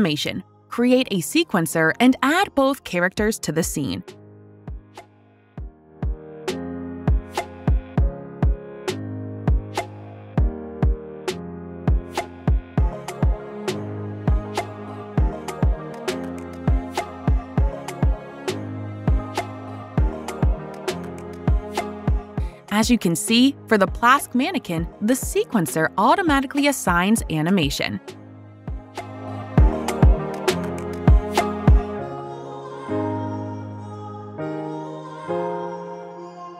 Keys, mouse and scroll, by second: 0.0 click, 1.0 click, 5.6 click, 5.6 typing, 7.0 click, 8.7 click, 11.7 click, 15.2 click, 15.2-15.7 typing, 16.9 click, 18.1 click, 19.7 click, 22.0 click, 23.7 click, 25.2 click, 27.6 click, 28.1 click, 31.7 click, 34.5 click, 35.3 click.